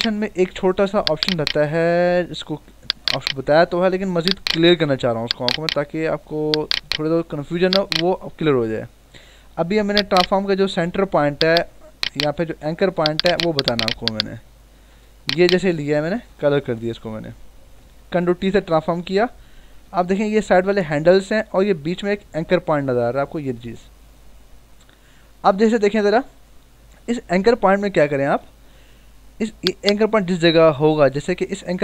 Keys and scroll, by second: 10.9 m, 13.0 ctrl+d, 16.2 alt+BackSpace, 16.9 ctrl+d, 18.3 ctrl+t, 19.5 ctrl+=.